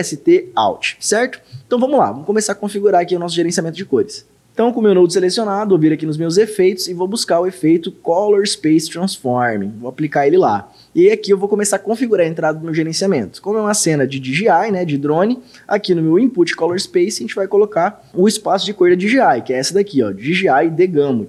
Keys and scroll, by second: 16.7 d.